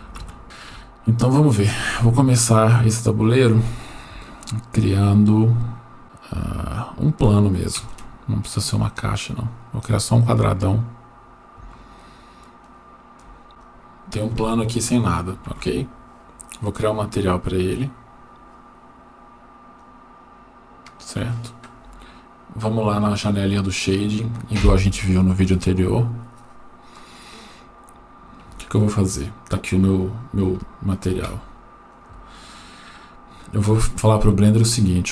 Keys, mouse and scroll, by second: 7.8 shift+a, 11.1-11.6 scroll up 4, 12.0-12.9 shift+middle drag, 13.5 click, 13.5 shift+a, 16.8-19.7 drag, 27.6 scroll up 2, 28.5 scroll up 3, 28.7-29.8 shift+middle drag, 30.0 scroll up 2, 30.6 shift+middle click, 31.9 click, 33.0 scroll up 1, 33.9 shift+middle click.